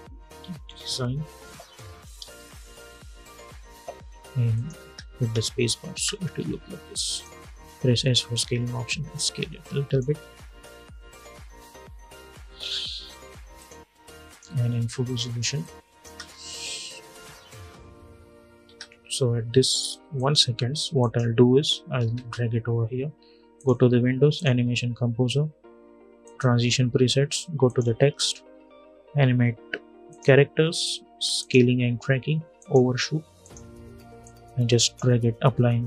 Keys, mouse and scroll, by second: 0.0-1.1 typing, 3.0 n, 4.3 click, 4.5 space, 6.8 click, 7.6 s, 8.0-12.5 drag, 13.3 click, 15.8 space, 18.4 space, 19.9 click, 21.8 [, 23.3 click, 29.8-35.8 drag.